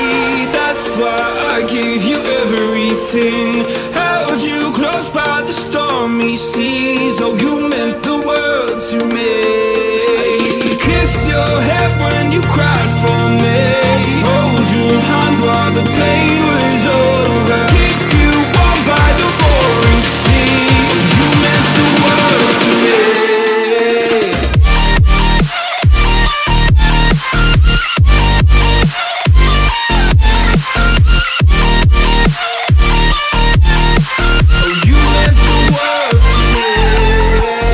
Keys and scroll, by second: 5.2 Tab, 6.1-7.0 space, 12.2-14.5 space, 19.9-20.6 space, 22.2 v, 22.8 space, 23.3 super+space, 23.4-25.6 super+space, 25.2 space, 25.7 alt+super+space, 25.8 alt+super+space, 25.9 alt+super+space, 26.0 alt+super+space, 26.1 alt+super+space, 26.2 alt+super+space, 26.4 alt+super+space, 26.5 alt+super+space, 26.6 alt+super+space, 26.7 alt+super+space, 30.1 space, 30.6 super+space, 30.7 super+space, 30.8 super+space, 30.9 super+space, 33.7 a, 35.9 i, 36.8 v, 37.4 a.